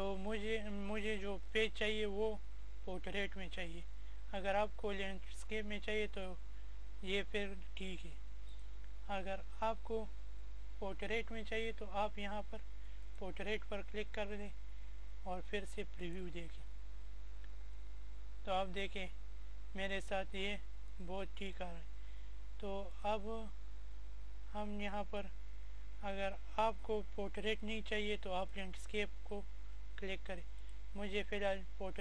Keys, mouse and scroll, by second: 4.6 click, 9.3 click, 13.0 click, 16.2-19.0 drag, 24.6 click.